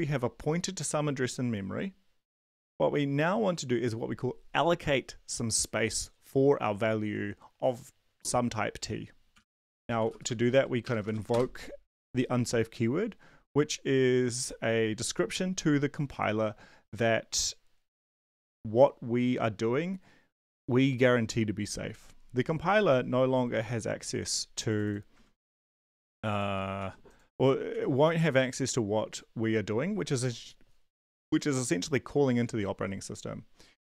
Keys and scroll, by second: 9.1-11.3 typing, 22.8 ctrl+s, 26.8 ctrl+c, 27.7 ctrl+b.